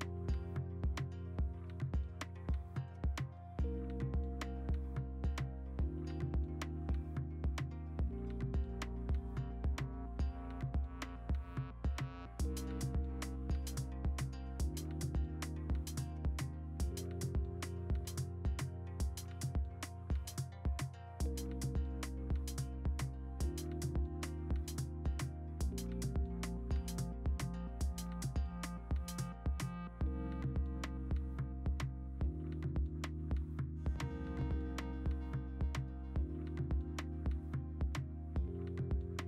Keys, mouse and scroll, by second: 0.0-0.5 typing, 1.7 x, 2.0 ctrl+z, 2.3 0, 2.6 ctrl+z, 3.7 ctrl+z, 7.1 ctrl+alt+z, 7.2-10.8 typing, 11.1 ctrl+d, 11.4 ctrl+z, 11.9 ctrl+d, 13.5 i, 14.9 b, 16.1 x, 16.4 x, 16.9 ctrl+d, 20.0-20.8 v, 21.4 b, 24.5 ctrl+z, 25.4 3, 28.9 v, 31.4 ctrl+alt+shift+e, 38.3 click.